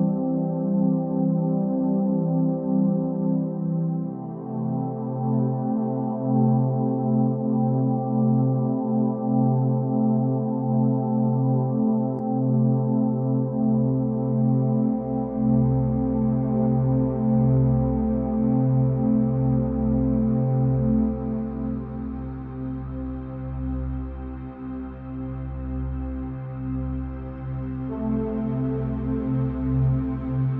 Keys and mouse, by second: 1.5-2.8 drag, 3.7 KP_3, 5.1 shift+e, 5.7 shift+d, 6.7 r, 9.2 KP_0, 9.9 shift+a, 11.8 KP_1, 12.5 shift+a, 14.2 KP_0, 16.7-18.0 drag, 17.6 0, 19.0 n, 20.2 click, 20.6 n, 24.3 g, 28.8 n, 29.8 click.